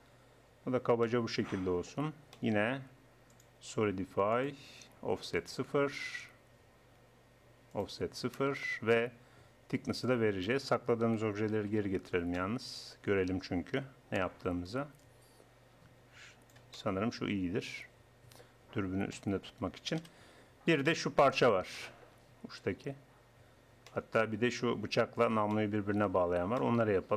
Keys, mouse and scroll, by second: 0.6 Tab, 7.4 middle click, 7.8-9.5 drag, 9.5 middle click, 10.1-11.5 drag, 11.6 alt+h, 15.1-16.6 drag, 16.6 click, 16.8-18.4 middle drag, 18.6 middle click, 20.0 KP_1, 25.2-27.0 middle drag.